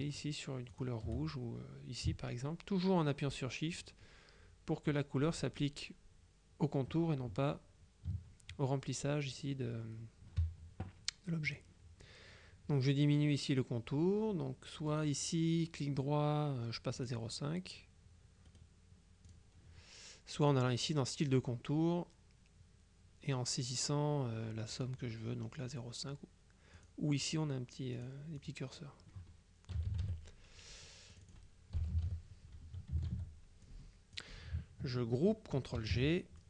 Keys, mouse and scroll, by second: 0.8 click, 3.9 shift+click, 11.6 click, 15.0 right click, 17.1 click, 18.6 right click, 19.4 click, 20.6 click, 26.8 click, 28.0 click, 29.8 KP_Subtract, 31.2 click, 31.9 KP_Subtract, 33.1 ctrl+z, 33.7-34.7 ctrl+drag, 35.9 ctrl+g.